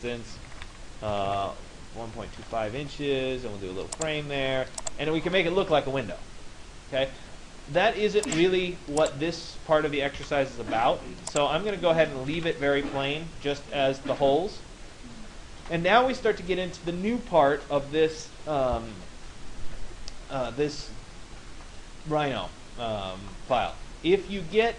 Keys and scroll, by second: 0.0 1, 0.9 Delete, 1.2 2, 1.3 5, 2.4 Return, 9.7 Delete.